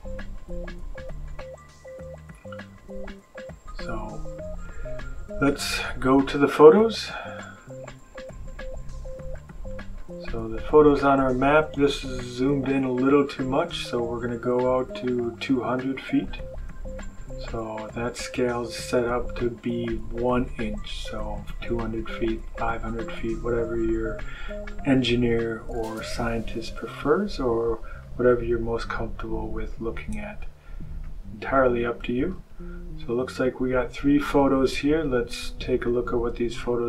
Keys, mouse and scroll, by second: 1.3-2.1 scroll down 3, 3.0-3.5 scroll up 1, 3.9-4.3 scroll up 1, 6.5 click, 9.2 click, 9.9 click, 12.7 click, 15.1 click, 18.1 click, 24.8 click, 26.4-28.1 drag, 29.6 click, 30.9-32.5 drag, 32.9-34.5 drag, 36.5 click.